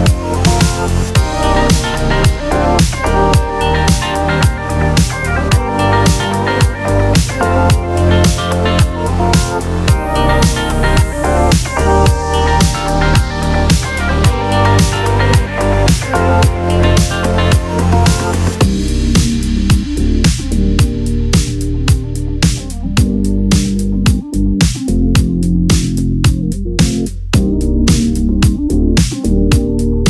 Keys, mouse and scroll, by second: 2.5 ctrl+z, 3.3 click, 4.8 right click, 7.4 click, 15.9 click, 25.4 click.